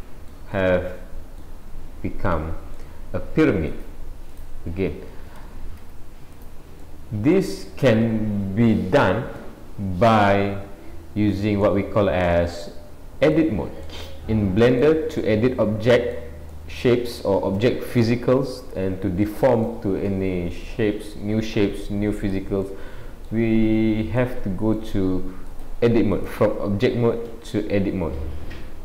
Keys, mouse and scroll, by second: 0.6 middle click, 1.6-2.3 scroll down 5, 2.3 middle click, 3.7 click, 4.3 click, 5.4 g, 6.8 middle click, 9.6-10.7 scroll up 4, 11.6 middle click, 13.8 middle click, 15.3 middle click, 16.5 middle click, 18.5 middle click, 20.1 middle click, 22.6 middle click, 24.2 middle click, 25.6 click.